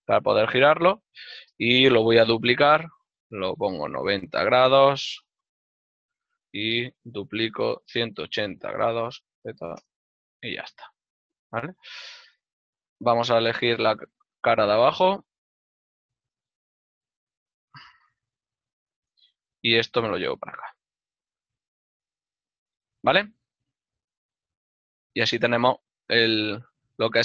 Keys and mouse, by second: 1.0 click, 2.2 z, 8.4 KP_0, 11.9 middle click, 13.7 click, 13.8 right click, 14.7 shift+right click, 16.6 KP_0, 20.3 click, 20.4 z, 20.9 click, 23.7 ctrl+middle click, 26.9 z.